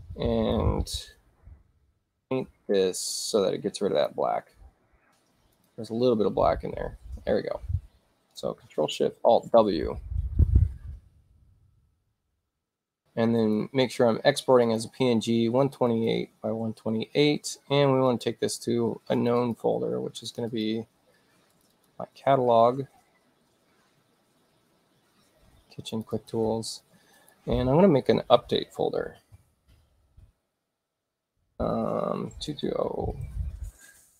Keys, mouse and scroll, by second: 1.2 ctrl+z, 2.3 click, 4.0 click, 5.6 click, 9.1 ctrl+alt+shift+w, 13.4 click, 14.7 click, 15.9 click, 18.1 click, 19.2 click, 19.4 click, 20.3 click, 20.5 click, 21.5 click, 21.7 click, 25.9 click, 26.1 click, 27.2 click, 29.3 ctrl+shift+n, 32.7-34.1 typing.